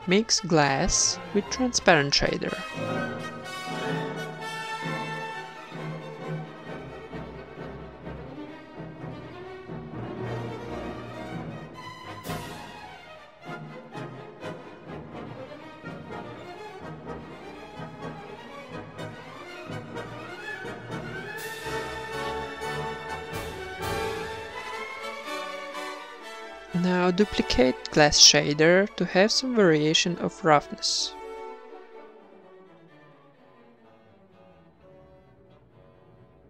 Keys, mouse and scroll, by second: 0.3-1.9 drag, 5.1 ctrl+v, 5.9-6.3 middle drag, 6.3 click, 6.3 g, 6.7 middle click, 6.8 shift+a, 9.4-10.2 drag, 10.0-11.1 middle drag, 11.1-13.0 drag, 13.8 click, 19.6-20.7 middle drag, 19.8 a, 19.9 b, 20.5 g, 20.9 middle click, 21.2-22.2 drag, 21.3 g, 22.2 middle click, 24.0-25.0 drag, 28.1-29.2 middle drag, 29.4 shift+d, 30.5 click, 30.6 ctrl+s, 31.8 middle click, 32.0 shift+b, 34.7 click.